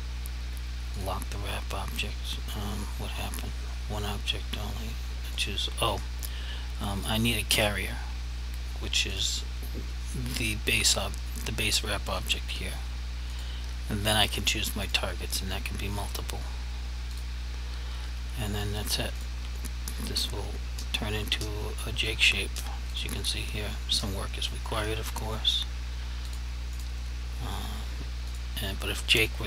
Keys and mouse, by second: 1.0 click, 5.4 click, 13.4 click, 23.0 click, 26.4 click.